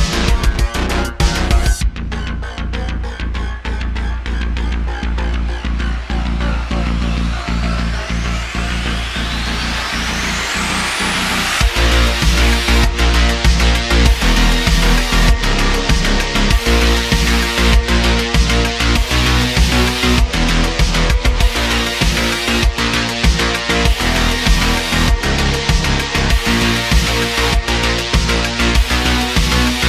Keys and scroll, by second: 0.2 i, 3.2 super+z, 4.1 e, 8.0 ., 10.5 super+r, 12.7 3, 18.4 3, 23.2 Tab, 24.9 /, 25.2 /.